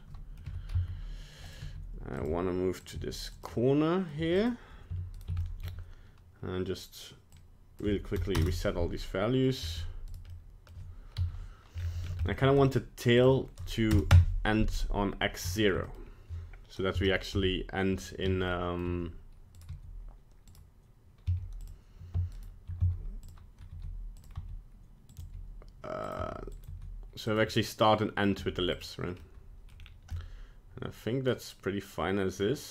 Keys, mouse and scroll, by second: 0.5 r, 1.6 g, 2.2 r, 3.0 g, 3.5 middle click, 4.2 g, 5.2 right click, 5.5 shift+middle click, 7.3 click, 9.0 middle click, 9.6-10.1 scroll up 3, 10.1 right click, 10.3 middle click, 10.7 middle click, 11.2 KP_1, 11.8 scroll up 3, 12.1 scroll down 1, 12.3 shift+middle click, 13.2 click, 15.5 shift+middle click, 15.9 middle click, 16.9 KP_0, 17.3 KP_1, 18.2 shift+scroll up 1, 18.5 shift+middle click, 19.6 right click, 19.7 g, 21.3 z, 22.3 shift+right click, 22.8 z, 23.7 g, 24.4 r, 25.2 g, 26.2 r, 26.7 g, 28.4 g, 29.2 middle click, 29.8 scroll down 2, 30.2 middle click.